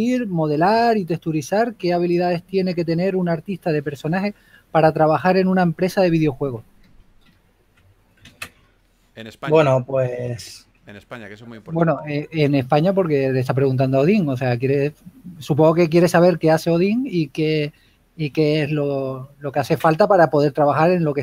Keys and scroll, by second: 1.2 typing, 5.3 typing, 7.6 typing, 8.8 super+z, 9.3 shift+s, 17.3 shift+s, 20.9 shift+s.